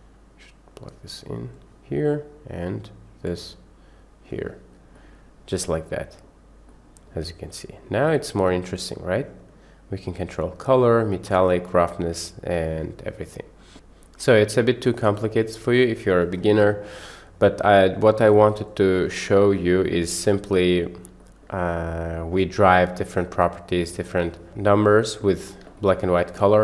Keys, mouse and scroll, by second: 1.8-2.7 drag, 3.3 drag, 3.6 click, 5.0-6.4 middle drag, 6.7-7.2 middle drag, 7.5-7.9 middle drag, 8.5 middle click, 9.2-9.6 middle drag, 10.2-10.6 middle drag, 11.3-12.5 middle drag, 14.4 middle drag, 14.9-15.5 drag, 15.7-16.1 drag, 16.7 Delete, 17.3 click, 18.4 click, 19.7-20.9 middle drag, 21.2 shift+middle click, 21.9 middle click, 23.9-24.2 middle drag, 24.4 shift+middle click, 25.8 shift+middle click.